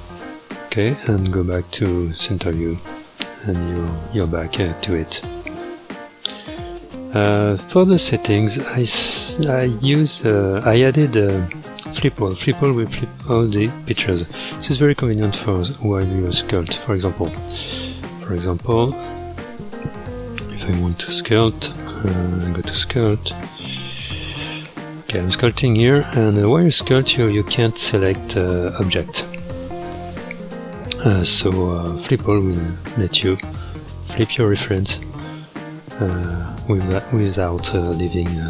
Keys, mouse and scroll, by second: 1.7-2.7 drag, 2.7-4.0 scroll up 11, 4.0 shift+middle click, 4.8-5.7 scroll up 6, 5.7 shift+middle click, 6.4-7.1 scroll up 3, 8.6 click, 9.3 click, 10.2-10.8 scroll down 1, 10.8-11.2 scroll up 3, 12.3-14.5 drag, 16.7 ctrl+Tab, 19.1 click, 21.0 ctrl+Tab, 24.7-27.7 drag, 32.8-34.4 drag, 34.4-34.9 scroll up 3, 34.9-36.0 shift+middle drag, 36.0-36.4 scroll up 2, 36.4-37.5 shift+middle drag, 37.5-38.0 scroll up 3, 38.0 middle click.